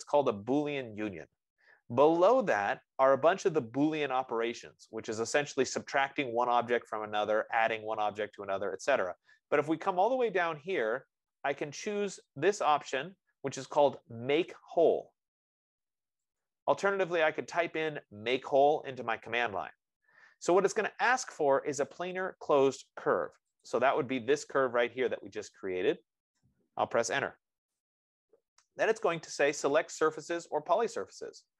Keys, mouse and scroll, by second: 3.0-7.9 drag, 16.7-21.7 drag, 21.6 F15, 23.9-28.9 drag, 27.7 Return.